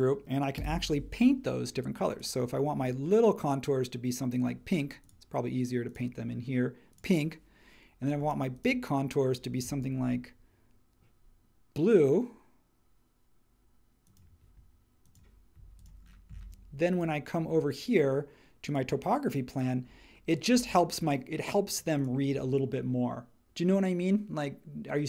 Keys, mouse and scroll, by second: 0.5 b, 8.2 space, 16.4-25.0 drag.